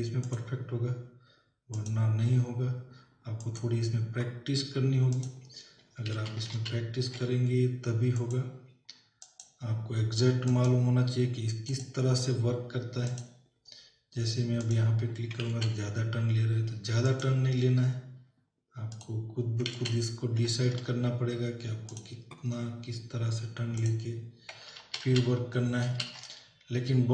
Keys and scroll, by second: 6.2 ctrl+z, 17.1 ctrl+z, 20.0 z, 24.8 ctrl+alt+z.